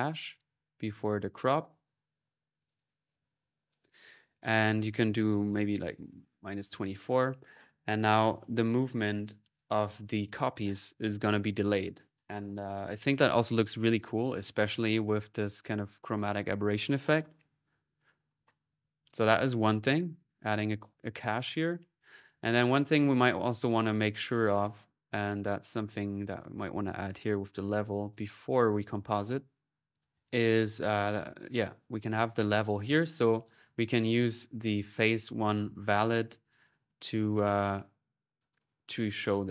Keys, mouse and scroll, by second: 0.1-1.2 drag, 1.5-3.1 drag, 4.4 click, 9.4-10.7 drag, 14.7-16.1 drag, 16.3-18.8 drag, 19.1 click, 19.6-23.1 drag, 23.8-25.6 drag, 24.3 middle click, 25.7 right click, 26.3-29.2 drag, 27.9 l, 29.7-31.0 drag, 31.3 click, 32.0 click, 32.8-33.9 drag, 33.9 middle click, 34.5-35.7 drag, 36.1-38.4 drag, 39.3 click, 39.4 typing.